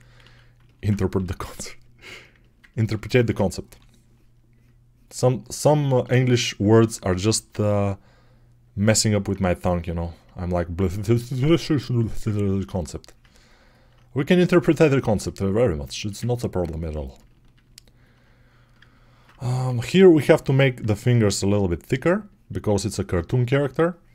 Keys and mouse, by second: 0.1 alt+q, 1.0 g, 3.5 6, 6.7 alt+q, 7.5 g, 10.5-19.5 drag, 19.5-24.1 right drag, 19.5 6, 24.0 g.